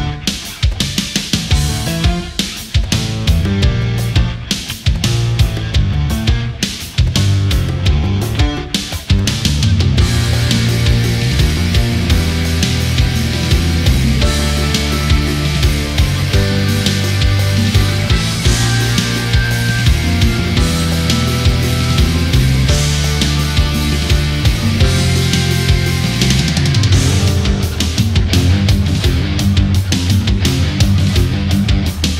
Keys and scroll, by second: 7.8 ctrl+z, 12.6 ctrl+=, 14.1 Delete, 14.8 Delete, 15.1 ctrl+z, 15.8 Delete, 16.1 ctrl+z, 19.2 Delete, 19.9 ctrl+z, 20.6 Delete, 21.1 Delete, 21.4 ctrl+z, 22.4 Delete, 26.7 ctrl+0, 27.8 ctrl+-, 28.0 ctrl+=, 28.1 space.